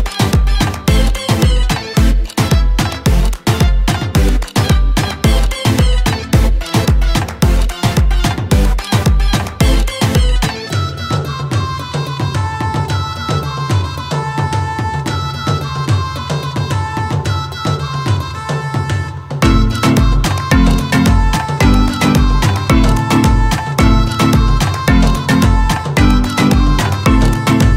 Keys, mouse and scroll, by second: 2.4 click, 3.7 click, 6.1 alt+scroll down 1, 8.5 click, 13.8 click, 16.6-18.0 typing, 20.5 Caps_Lock, 20.9-22.5 typing, 24.1-27.7 drag.